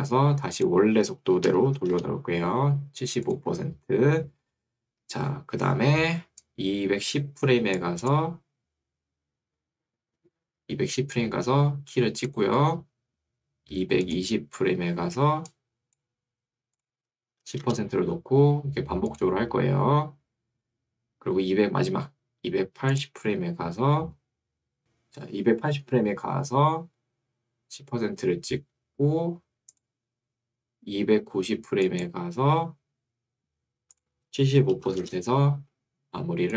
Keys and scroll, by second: 1.4-2.3 typing, 17.4 1, 17.6 Return, 35.0 Return.